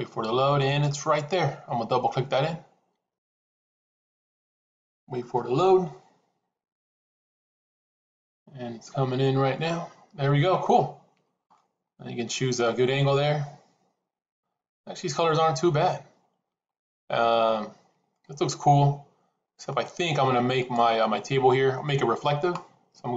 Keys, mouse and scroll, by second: 11.4-17.5 middle drag, 18.1-19.6 middle drag, 20.5 click.